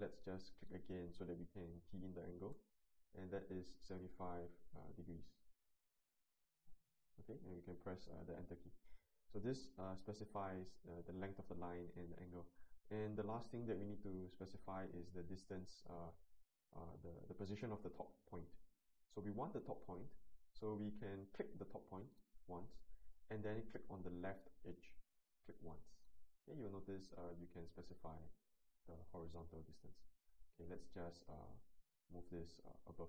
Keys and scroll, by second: 2.3 typing, 5.6 Return.